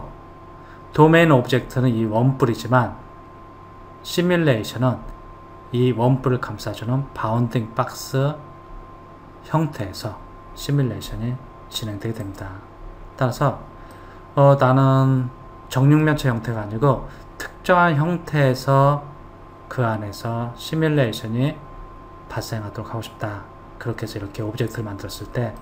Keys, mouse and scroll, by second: 12.6 click, 14.2-17.3 middle drag.